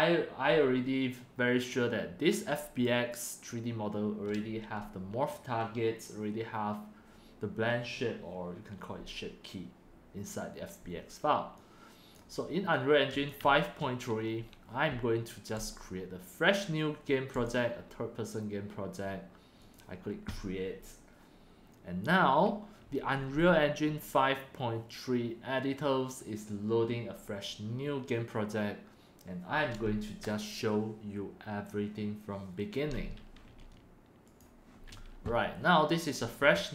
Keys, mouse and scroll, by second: 12.1-15.0 drag, 19.7-20.0 drag, 22.7-24.8 drag, 34.3 click, 36.6 click.